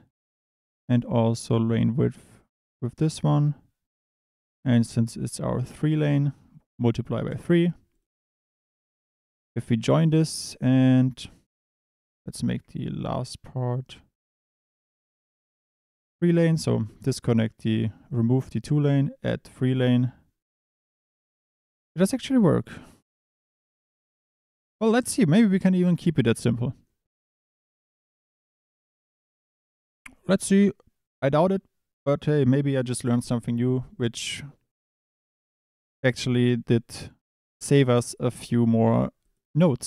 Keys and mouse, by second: 1.4 click, 6.4 click, 7.9 click, 9.6 drag, 12.1 Tab, 13.6 shift+click, 14.2 2, 15.7 click, 19.2 click, 20.7 click, 21.4 Tab, 21.8 click, 22.0 click, 23.0 click, 23.4 click, 24.4 Tab, 24.6 click, 24.9 click, 25.7 click, 28.6 click, 29.8 click.